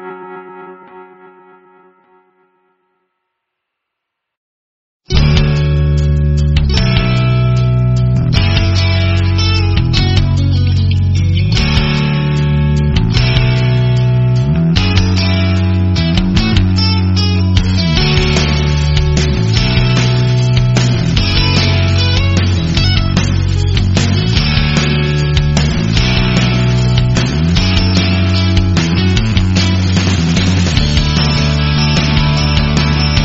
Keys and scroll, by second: 4.8 BackSpace, 6.7 space, 9.4 a, 12.1 v, 14.6 a, 17.5-18.5 typing, 19.9 o, 22.3 v, 22.9 space, 28.4 Right, 31.5 BackSpace, 33.1 o.